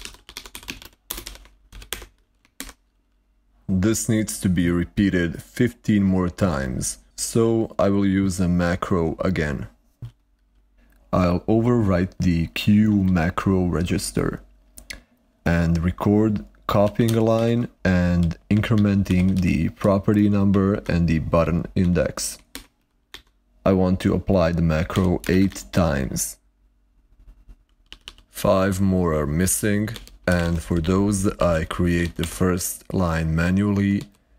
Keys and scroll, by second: 0.0-2.2 typing, 12.7 typing, 16.6-20.2 typing, 18.6 ctrl+a, 20.6 ctrl+a, 23.0 ctrl+q, 24.6-25.8 typing, 27.8 typing, 29.4-34.3 typing.